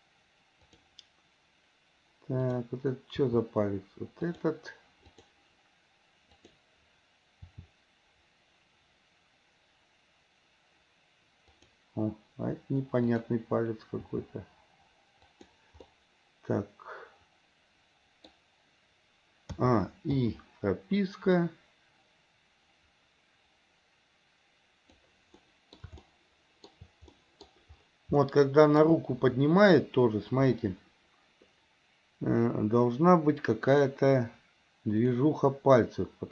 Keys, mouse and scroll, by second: 2.4 click, 3.5 r, 5.3 click, 6.5 click, 7.7 r, 13.2 click, 14.2 r, 16.0-18.6 middle drag, 19.7 a, 20.5 i, 21.6-25.2 drag, 25.5-26.0 middle drag, 26.2-26.9 shift+middle drag, 27.3-27.7 middle drag, 28.5-29.1 shift+middle drag, 33.8 click.